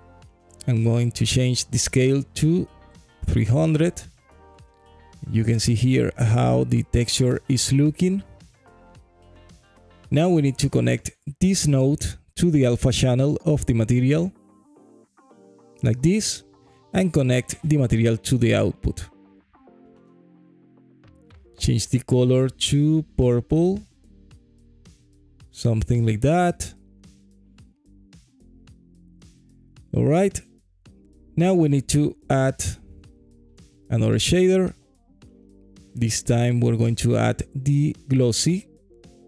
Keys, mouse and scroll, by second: 1.1-2.9 drag, 2.7 KP_0, 9.1 middle click, 10.7-12.1 scroll down 1, 12.4-15.2 drag, 16.7 middle click, 18.1-18.8 drag, 21.4 click, 22.0 click, 30.1-31.1 middle drag, 32.0 click, 33.0 middle click, 33.6 click, 33.9 shift+a, 36.0 s.